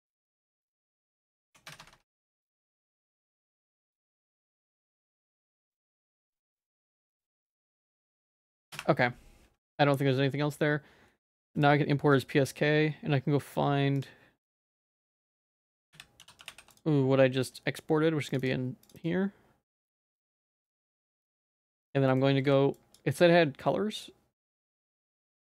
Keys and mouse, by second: 9.8-11.7 drag, 20.6 middle click, 21.1 g, 21.6 shift+middle click, 22.4 ctrl+s, 22.8 click, 23.3 click, 24.6 middle click, 24.9 shift+middle click, 25.3 middle click.